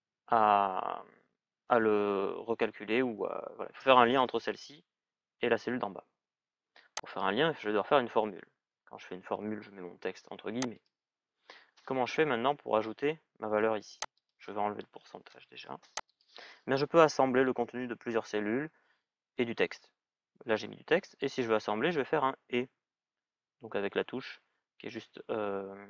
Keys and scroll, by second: 15.0 BackSpace.